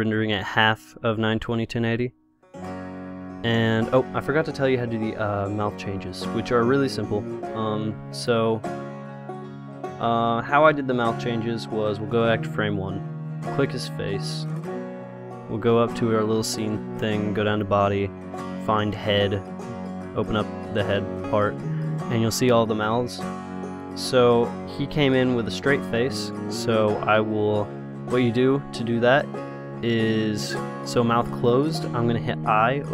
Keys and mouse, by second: 4.5 middle click, 5.2 middle click, 7.1 click, 10.7-12.1 drag, 13.3-15.6 middle drag, 15.6-19.5 drag, 19.5 middle click, 20.3-22.2 drag, 22.2-32.7 middle drag, 32.7 i.